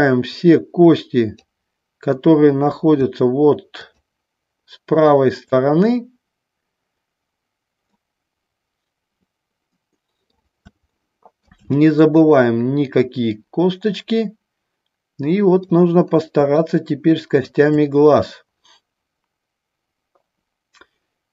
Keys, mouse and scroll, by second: 3.9 shift+click, 5.2 shift+click, 8.0-10.4 middle drag, 11.2 shift+middle click, 12.4-15.8 middle drag, 16.8 shift+middle click.